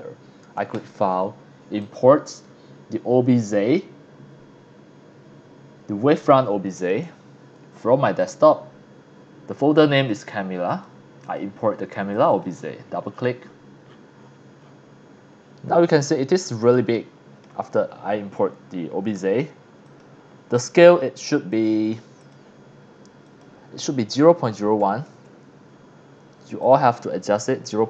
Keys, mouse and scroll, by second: 0.7 click, 1.8 click, 6.8 click, 8.2 click, 9.9 click, 10.7 click, 11.2 click, 12.1 click, 12.3 click, 13.1-14.3 scroll down 4, 14.6-15.1 scroll up 6, 16.2-16.6 shift+middle drag, 16.9 middle click, 19.8 click, 21.5 click, 22.2 click, 23.3 click, 24.2 KP_0, 24.4 KP_Decimal, 24.8 KP_1, 25.1 KP_Enter, 26.6 click, 27.5 KP_0, 27.7 KP_Decimal.